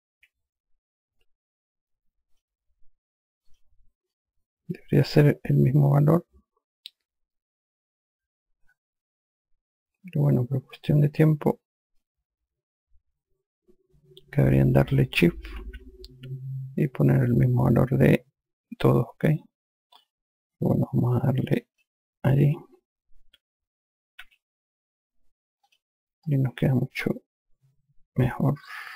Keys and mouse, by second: 0.5 q, 2.7 click, 3.9 click, 12.3 click, 17.5 click, 22.1 click, 24.6 q, 26.0 click, 26.6 alt+click.